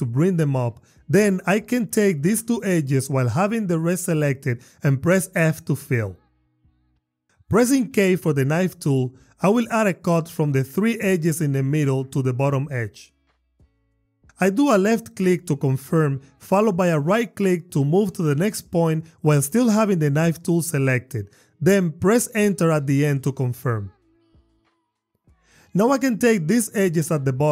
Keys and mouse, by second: 1.1 click, 3.8 shift+click, 5.3 f, 7.4 k, 11.5 click, 13.3 a, 14.1 click, 16.5 click, 18.5 click, 19.9 click, 20.5 click, 21.6 click, 22.2 click, 22.6 Return.